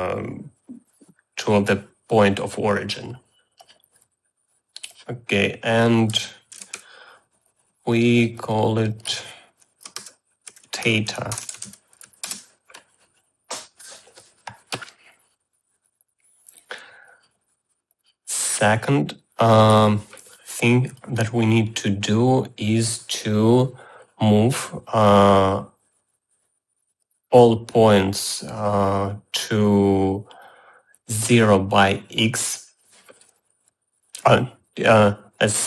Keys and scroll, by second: 6.5-7.4 typing, 10.5-12.8 typing.